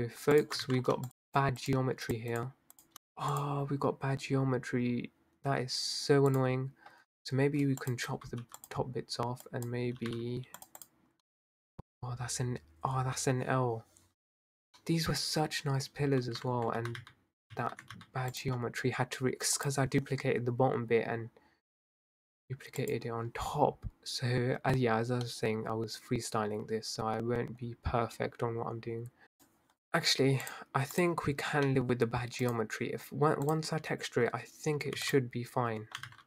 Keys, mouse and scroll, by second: 0.7 ctrl+z, 1.1 shift+click, 1.5 shift+click, 1.9 shift+click, 2.3 shift+click, 2.7 shift+click, 3.2 click, 4.1-4.4 scroll down 5, 6.3 click, 7.0-7.5 scroll up 3, 7.8 shift+click, 8.4 x, 9.3 click, 9.9 g, 10.9 drag, 11.3-12.0 middle drag, 12.0 scroll down 3, 14.7-16.8 middle drag, 16.8 ctrl+z, 17.0 ctrl+z, 17.5 ctrl+z, 17.9 ctrl+z, 18.3 click, 18.9 scroll up 3, 19.6 click, 20.0 scroll down 3, 22.7 click, 23.1-23.4 scroll up 4, 24.6-25.2 scroll down 4, 25.2-28.4 middle drag, 29.2 scroll down 2, 29.3 click, 30.4-31.6 drag, 31.6-32.0 middle drag, 32.0 scroll up 1, 32.5 click, 33.5 click, 35.0 x, 36.1 ctrl+z.